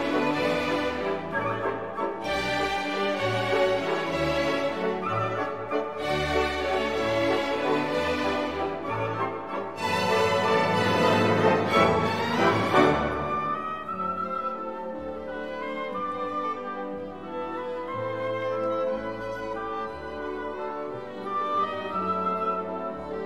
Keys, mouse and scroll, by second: 0.8 click, 4.8 click, 8.1 0, 10.2 click, 13.3 x, 14.6 0, 16.8 click, 18.0 7, 18.6 0, 20.7 click, 22.0-23.1 typing.